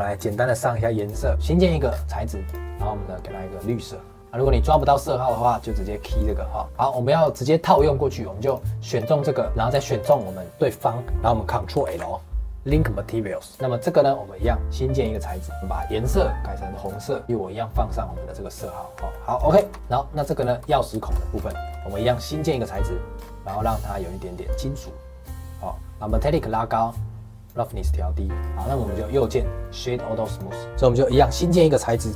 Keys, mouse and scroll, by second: 0.9 click, 1.8 scroll down 4, 2.4 click, 4.7 click, 6.6 scroll up 1, 6.7 middle click, 7.2 click, 7.6 click, 8.4 click, 8.9 click, 9.5 middle click, 9.9 shift+click, 11.8 ctrl+l, 13.7 click, 15.0 click, 17.2 click, 19.1-20.2 middle drag, 20.2 click, 20.4 shift+middle click, 20.6 scroll up 2, 20.9 shift+middle click, 21.3 scroll up 2, 21.5 shift+middle click, 22.4 click, 23.1 scroll down 3, 24.4-28.3 drag, 28.3-28.8 scroll down 6, 28.8 middle click, 29.0-30.7 right drag, 30.7-32.1 drag.